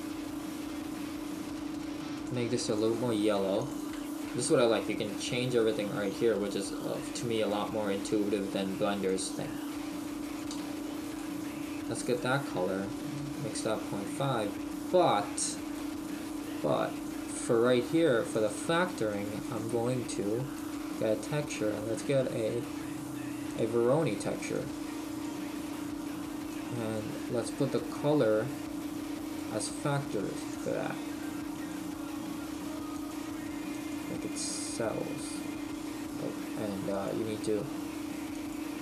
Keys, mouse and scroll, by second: 13.5 click, 24.6 click, 26.5 click, 29.3 click, 30.7 click, 33.1 click, 37.0 click.